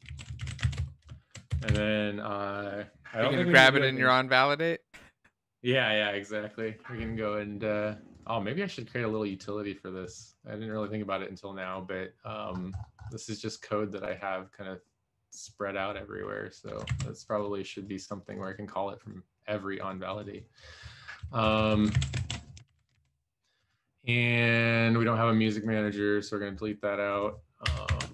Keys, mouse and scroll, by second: 0.2 ctrl+s, 0.4 alt+shift+f, 0.8 ctrl+s, 0.8 Return, 1.4 ctrl+Return, 1.8 ctrl+s, 21.6 Return, 21.7 Up, 22.0 ctrl+v, 22.2 ctrl+s, 22.7 alt+shift+f, 22.9 ctrl+s, 27.9 Delete.